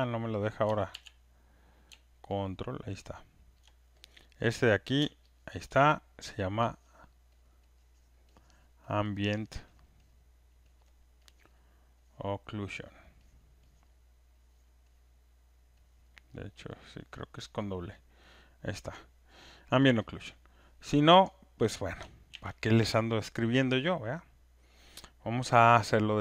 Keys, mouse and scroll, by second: 0.9 ctrl+z, 4.9 click, 6.1-10.8 ctrl+drag, 8.8 ctrl+F1, 10.8 ctrl+F1, 11.5 ctrl+F1, 12.2 ctrl+F1, 13.0 ctrl+F1, 13.4 ctrl+F1, 13.8 ctrl+F1, 14.7 ctrl+F1, 15.0 ctrl+F1, 16.1 ctrl+F1, 16.8 ctrl+F1, 17.3 click, 17.7 click, 21.3 click, 22.3 ctrl+F1.